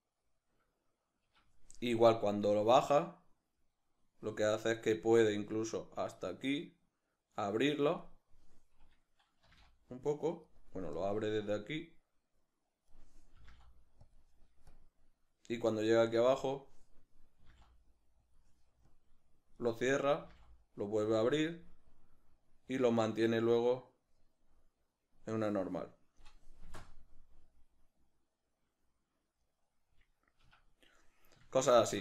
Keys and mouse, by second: 1.2 Escape, 9.4 g, 10.6 right click, 11.0-14.2 drag, 13.4 g, 14.0 g, 14.8-18.4 drag, 17.4 g, 18.2 g, 19.0-21.2 drag, 20.2 g, 22.0-26.6 drag, 26.6 space, 29.8-31.5 drag, 30.4 Escape, 31.5-32.0 shift+middle drag.